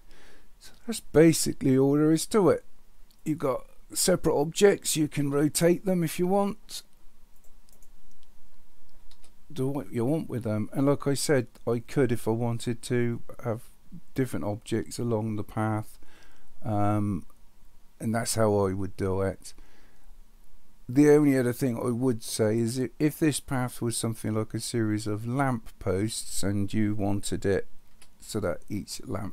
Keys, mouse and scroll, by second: 5.2 r, 9.1 r, 27.9 KP_1.